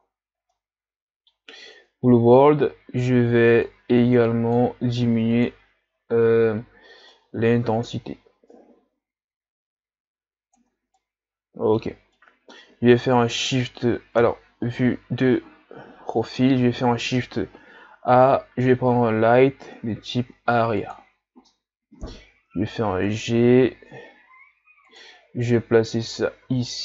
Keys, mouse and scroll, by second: 0.1-0.5 scroll down 2, 0.5-7.4 middle drag, 7.4-11.0 drag, 11.0-14.2 middle drag, 14.2 KP_3, 22.4 g, 26.5 r.